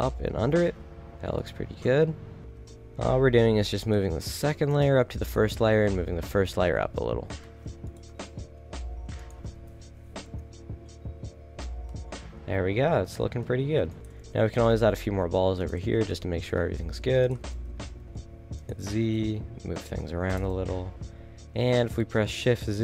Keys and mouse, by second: 1.1 a, 1.8 middle click, 2.5 g, 4.0 g, 5.0 a, 5.4 g, 8.0 g, 9.3 a, 9.8 KP_7, 10.2 KP_0, 14.2 shift+d, 15.8 a, 17.3-18.7 drag, 17.5 shift+d, 18.8 g, 20.3 KP_0, 21.0 shift+z.